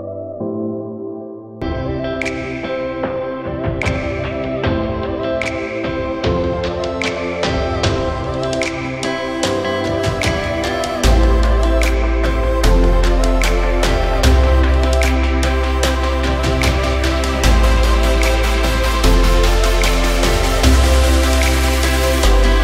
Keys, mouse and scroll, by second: 0.9 Return, 2.7 ctrl+t, 8.0 Return, 9.7 ctrl+t, 11.0 shift+click, 13.3 Return, 20.5 ctrl+alt+scroll up 1.